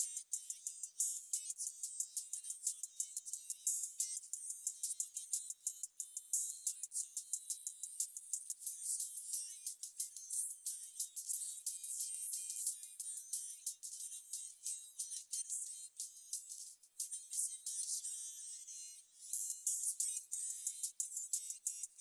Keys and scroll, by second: 16.9-17.6 typing, 17.8 ctrl+super+w.